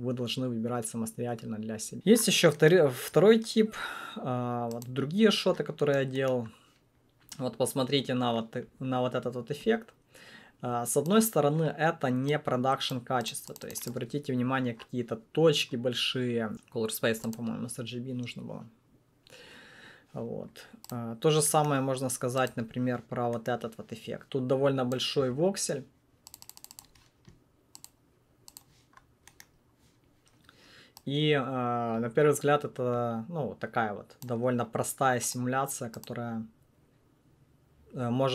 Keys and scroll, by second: 4.9 1, 22.5 1.